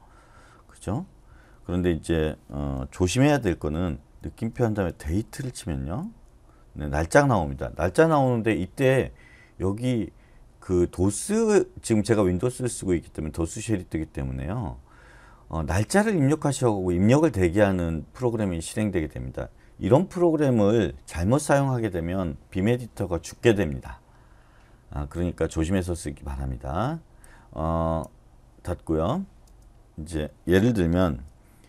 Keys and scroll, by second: 3.4-5.3 typing, 5.9 Return, 29.5 space.